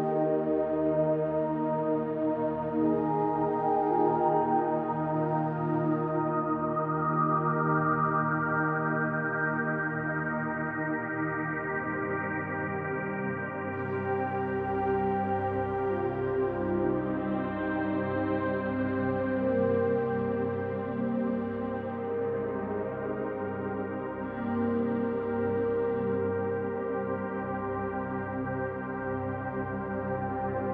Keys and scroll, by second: 13.2 ctrl+space, 19.0 space, 23.8 b.